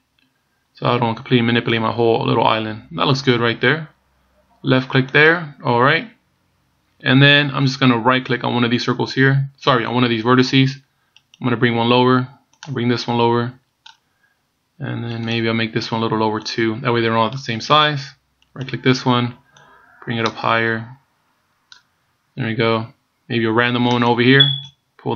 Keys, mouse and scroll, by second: 11.4 right click, 12.7 click, 15.3 right click, 16.7 click, 18.7 right click, 19.8 click, 24.1 right click.